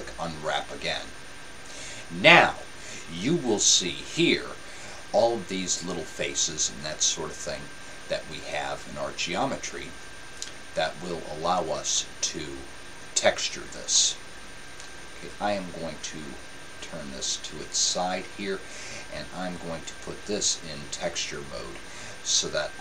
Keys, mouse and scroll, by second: 13.9-16.4 middle drag, 19.9-22.8 drag.